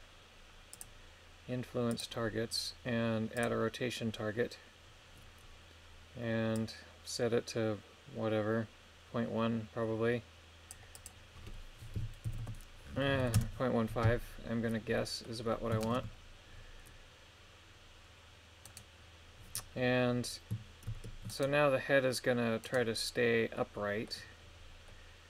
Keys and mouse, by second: 0.7 click, 1.9 click, 3.3 click, 6.5-10.7 drag, 10.9-13.3 drag, 15.0 middle click, 15.8 shift+space, 18.6 right click, 20.9 ctrl+Tab, 21.3 right click, 22.7 right click, 23.6 middle click, 24.8 middle click.